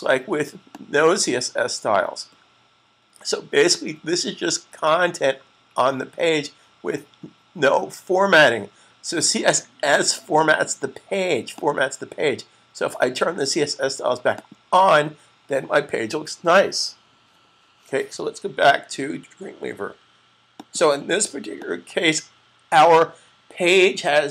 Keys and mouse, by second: 0.5 click, 11.3 click, 14.2 click, 20.4 click.